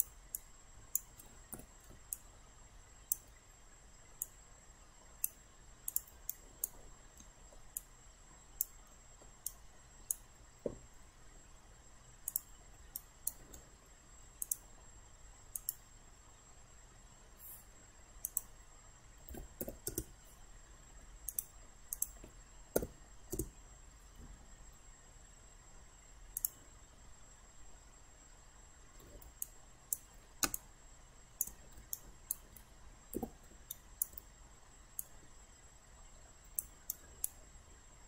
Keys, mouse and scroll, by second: 0.4 alt+click, 1.6 alt+f, 2.1 alt+click, 4.2-5.4 drag, 6.3 alt+right click, 7.2 alt+middle click, 7.8 alt+click, 8.9 alt+middle click, 12.3 click, 13.0 alt+right click, 14.4 click, 19.7 2, 19.9 Return, 21.3 click, 23.4 Return, 26.4 click, 27.1-29.3 middle drag, 29.5 alt+click, 30.6 click, 31.9 alt+right click, 33.2 alt+w, 33.7 alt+right click, 35.0-36.7 drag, 36.9 alt+right click.